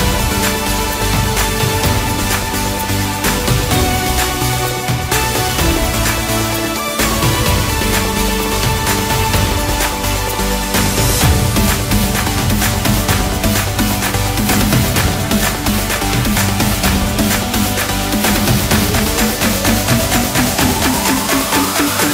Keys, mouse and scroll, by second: 0.2 shift+click, 0.4 shift+click, 0.9-2.1 middle drag, 2.1 shift+click, 2.3 shift+click, 2.7-4.5 middle drag, 4.5 e, 9.9-13.0 middle drag, 14.2 alt+h, 15.2-18.4 middle drag, 19.2-19.8 scroll up 1, 19.8 click, 20.6 click, 21.2-22.1 middle drag.